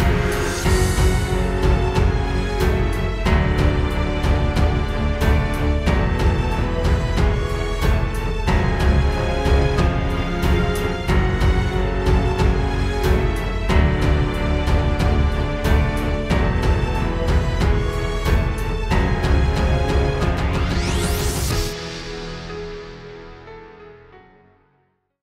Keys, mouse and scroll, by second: 2.6 click, 5.6 right click, 8.0 space.